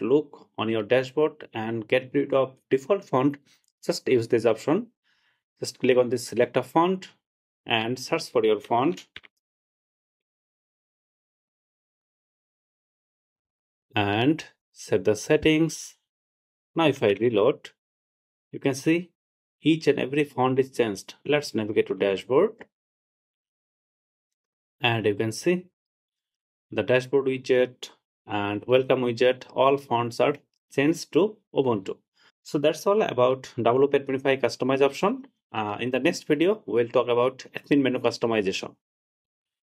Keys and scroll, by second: 17.3 super+r.